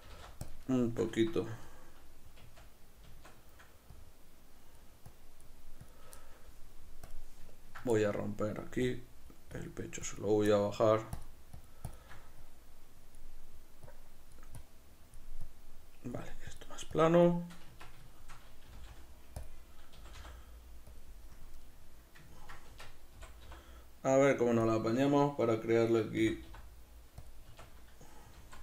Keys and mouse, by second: 0.1 g, 0.6 click, 0.7-3.9 shift+middle drag, 1.1 Tab, 2.4 Tab, 3.3 b, 3.9 click, 6.2 shift+middle click, 7.1 click, 7.5-8.8 ctrl+middle drag, 8.8 click, 17.7 b, 17.8 click, 18.1-19.5 shift+middle drag, 18.7 g, 19.5 click, 19.6-21.0 middle drag, 20.0 g, 21.0 click, 21.4 KP_Decimal, 21.6-24.7 middle drag, 22.7 Tab, 24.7 click, 26.2 s, 27.3 click, 27.5 Tab.